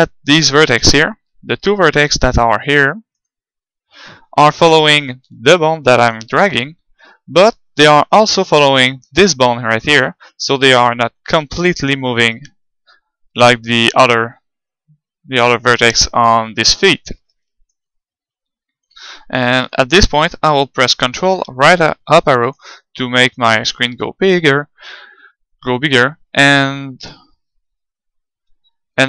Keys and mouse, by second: 0.3 click, 1.1-4.3 middle drag, 4.4-5.9 middle drag, 6.6 g, 6.8 middle click, 8.2-9.9 right drag, 10.5-12.3 middle drag, 12.3-15.1 right drag, 12.5 g, 17.4-19.3 middle drag, 20.5 ctrl+Up, 22.3-25.0 middle drag.